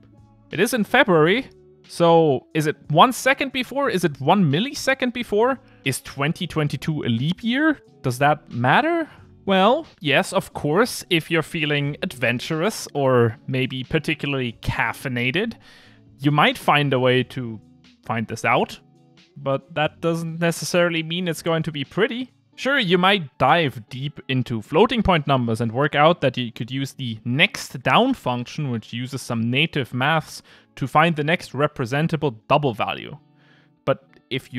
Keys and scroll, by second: 5.1 Return, 32.9 Return.